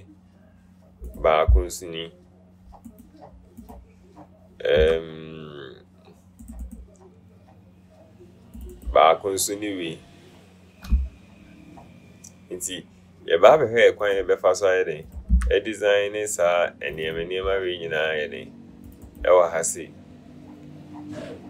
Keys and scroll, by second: 5.1 BackSpace, 15.6 BackSpace.